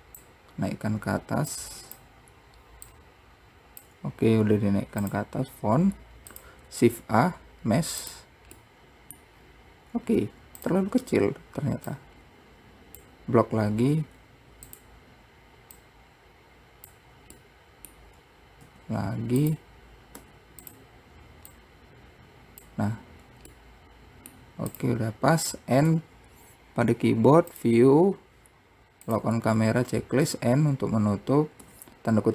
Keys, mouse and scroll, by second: 1.7-3.1 drag, 5.9-6.2 scroll up 2, 6.4 click, 7.0 shift+a, 8.8 middle click, 9.5-10.3 scroll down 2, 12.0 click, 14.1 s, 15.9 click, 17.6-18.8 middle drag, 18.8 s, 21.7 click, 23.1-23.7 scroll down 3, 23.7-24.9 middle drag, 24.9 click, 26.0 n, 27.6 click, 30.4 n.